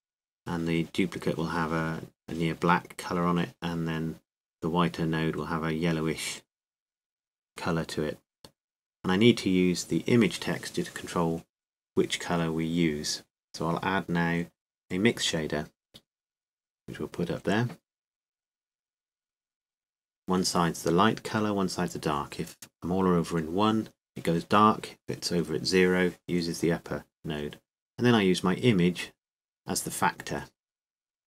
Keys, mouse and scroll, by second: 2.5-14.2 drag, 19.1 click, 19.6-21.5 middle drag, 21.5-31.2 drag.